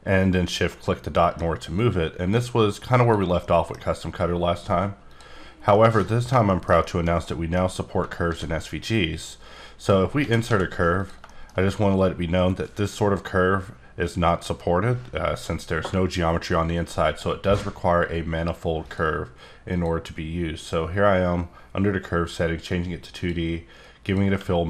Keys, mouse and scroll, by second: 1.1 middle click, 1.8 click, 3.0 click, 3.4 middle click, 5.1 click, 5.7 middle click, 6.6 shift+scroll down 1, 6.8 shift+middle click, 8.2 shift+a, 9.2 click, 10.1 g, 10.5 x, 11.0 click, 11.2 shift+middle click, 11.6 scroll up 1, 18.9 click, 19.6 click, 24.0 click.